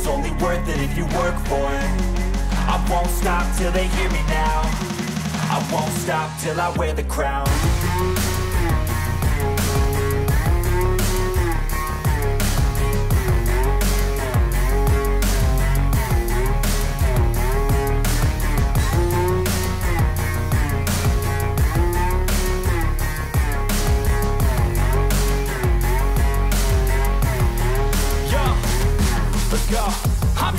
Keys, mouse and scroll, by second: 4.9 click, 6.0 click, 8.0 scroll, 10.9 click, 14.9 click, 15.7 click, 19.6 click, 21.6-23.3 drag, 26.9 d, 27.8 right click.